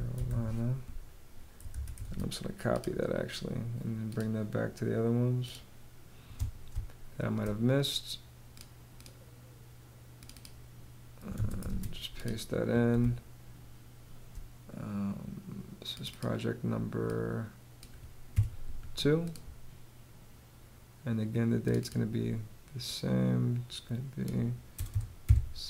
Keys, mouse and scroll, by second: 0.0-0.3 typing, 1.2 super+a, 1.5 super+c, 6.2 space, 10.8 super+a, 11.1 super+v, 12.5 space, 17.8 2, 24.2 0, 25.5-25.6 typing.